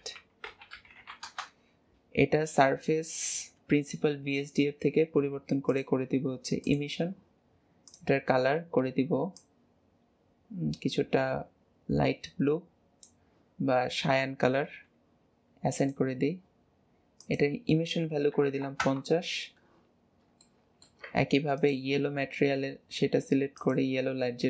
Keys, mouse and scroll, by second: 3.0-7.9 drag, 15.8-20.1 drag, 20.1-20.5 scroll down 2, 20.5 shift+middle click, 21.1 Tab, 21.6 click, 23.5-24.4 drag.